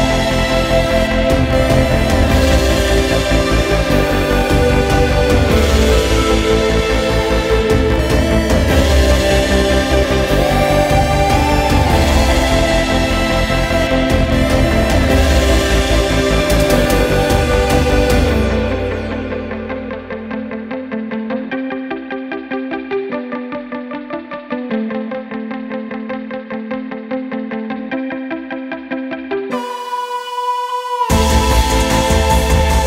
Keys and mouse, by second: 10.4-12.8 drag, 14.8 click, 20.3 click, 23.6 ctrl+t.